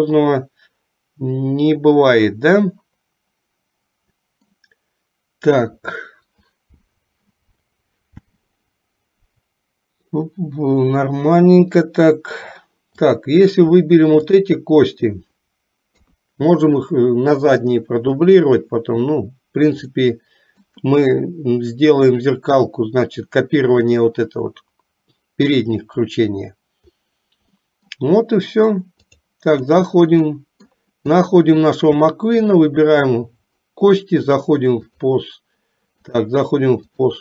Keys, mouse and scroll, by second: 13.0 click, 14.3 shift+click, 16.1 KP_3, 20.1 middle click, 27.8 middle click, 29.2 click, 30.3 middle click, 31.3 click, 32.6 shift+click, 34.4 click, 36.1-37.2 drag.